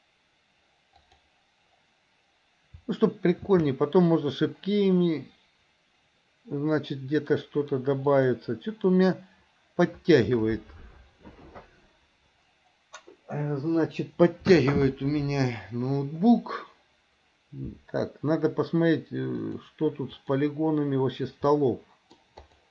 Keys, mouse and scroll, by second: 4.3 shift+d, 19.4-20.5 drag, 21.6-22.3 middle drag, 22.6 click.